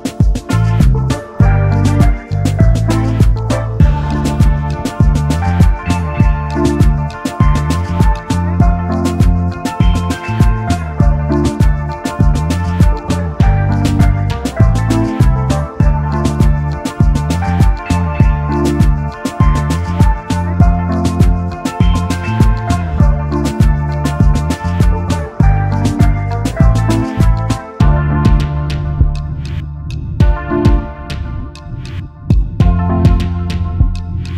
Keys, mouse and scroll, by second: 0.3 shift+click, 1.6-2.1 alt+scroll down 1, 2.5 double click, 3.1-3.9 alt+scroll down 1, 4.0 alt+scroll up 1, 4.8 double click, 10.2 shift+click, 11.5-11.8 alt+scroll down 1, 12.9-15.2 alt+scroll down 1, 15.5-15.9 alt+scroll up 1, 16.7 alt+shift+click, 17.5-18.0 alt+scroll up 1, 20.2 shift+click, 22.8 double click, 25.1 alt+shift+click, 28.1-28.5 alt+scroll up 1, 29.7 alt+shift+click, 32.1 alt+scroll down 1, 33.5-34.3 alt+scroll up 1.